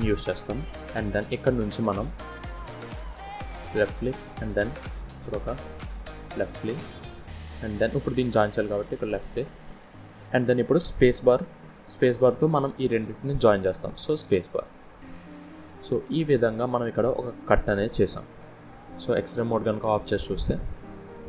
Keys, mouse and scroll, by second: 14.3 scroll down 2, 14.6 middle click.